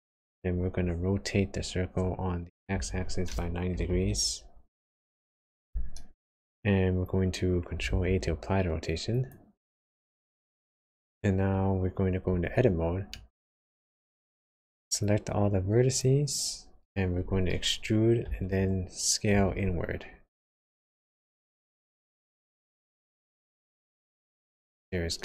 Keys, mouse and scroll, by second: 1.3 r, 7.9 ctrl+a, 12.4 Tab, 13.1 middle click, 14.5 click, 15.0 click, 18.2 e.